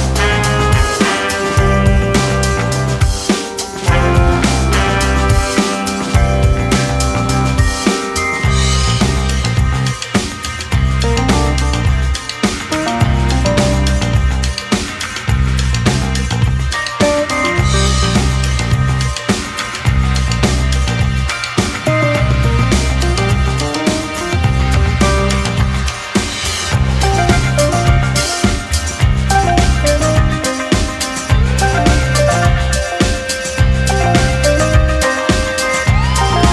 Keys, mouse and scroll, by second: 0.0 click, 1.1-3.1 scroll down 5, 3.1 click, 3.6-4.6 scroll down 3, 4.6 click, 6.3-7.4 scroll down 5, 7.4 click, 7.9-8.9 scroll down 5, 8.9-11.4 drag, 11.4-13.9 middle drag, 13.9 Tab, 14.4 Tab, 15.0-16.0 shift+middle drag, 16.0 alt+z, 16.4-17.0 shift+middle drag, 17.0 space, 17.7 space, 18.4-20.2 middle drag, 20.2 ctrl+2, 21.0 right click, 22.4-23.4 scroll down 1, 23.4-25.2 drag, 25.5 click, 25.8 Tab, 26.0-27.4 scroll up 2, 27.4 3, 27.9-28.4 scroll up 1, 28.4 alt+z, 28.7-32.7 middle drag, 33.0 click, 34.2 KP_Enter, 34.5 KP_Decimal, 35.2-36.2 scroll down 11, 36.2-36.5 middle drag.